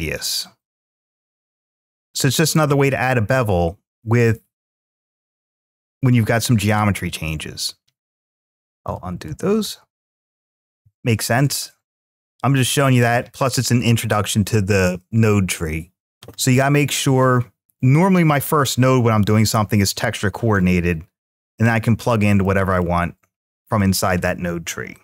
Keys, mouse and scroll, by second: 0.8-1.8 drag, 2.2-3.6 drag, 4.0-7.1 drag, 12.1-13.9 middle drag, 17.6-19.6 drag, 22.2 middle click, 23.3-25.0 middle drag.